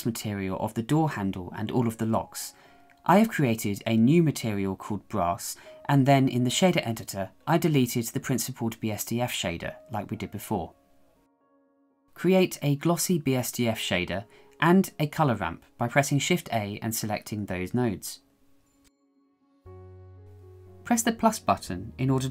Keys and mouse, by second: 1.2 middle click, 3.6-5.0 shift+middle drag, 5.7 click, 7.9 shift+middle click, 8.4 click, 8.7 shift+a, 11.5 s, 13.3 click, 14.4 shift+middle click, 14.9 shift+middle click, 16.3 shift+a, 20.7 click, 21.9 shift+middle click.